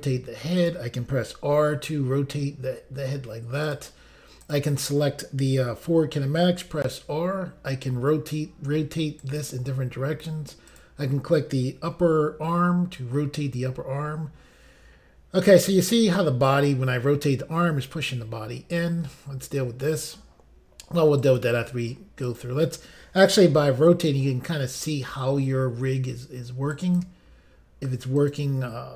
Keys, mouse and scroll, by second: 0.6 click, 1.3 r, 3.7 click, 4.4 click, 9.2 right click, 10.7 click, 11.9 r, 21.2 right click, 22.2 click, 23.5 r, 26.7 right click, 28.2 click, 28.3 click.